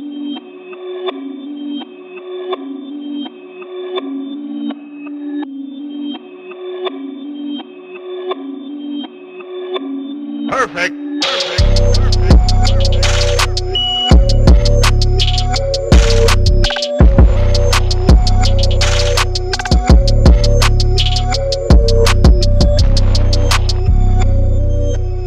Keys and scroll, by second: 0.5 super+t, 0.9 Return, 1.0 super+=, 1.1 super+=, 1.5 b, 2.0 v, 2.3 super+0, 2.6 super+1, 3.1 super+=, 3.3 b, 4.6 super+z, 4.9 v, 4.9 super+0, 5.6 super+1, 5.8 super+t, 6.3 Return, 7.5 super+t, 8.6 Return, 8.7 Left, 8.8 Left, 8.8 Right, 8.9 Down, 11.9 super+t, 12.4 Return, 13.3 super+t, 14.1 Return, 14.2 super+=, 14.3 super+=, 14.7 super+0, 14.8 super+1, 15.9 super+t, 16.5 Return, 17.6 super+t, 18.5 Return, 19.5 super+z, 19.6 super+z, 20.9 super+1, 21.0 super+=, 21.1 super+=, 21.1 b, 22.7 v, 23.4 super+0, 23.5 super+t, 24.0 Return, 24.1 super+1.